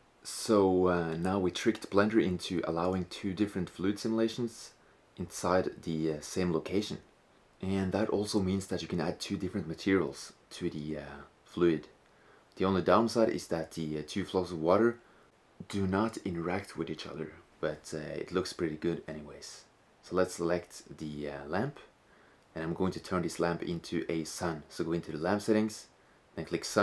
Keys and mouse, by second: 1.6-4.2 middle drag, 5.4-6.0 middle drag, 6.2-6.8 middle drag, 7.5 middle click, 7.7 middle click, 12.1-13.9 drag, 17.2-19.2 middle drag, 19.7-21.7 right drag, 25.0-26.8 drag.